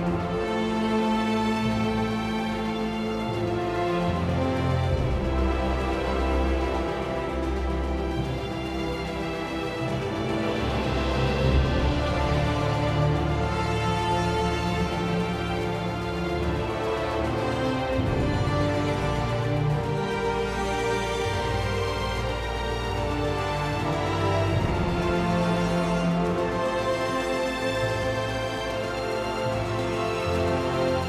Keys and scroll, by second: 20.0 r.